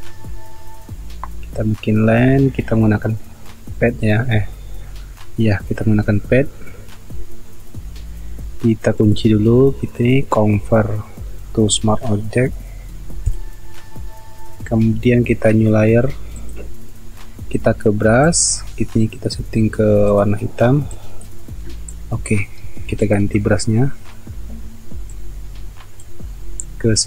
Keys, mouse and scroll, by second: 22.6 ctrl+z.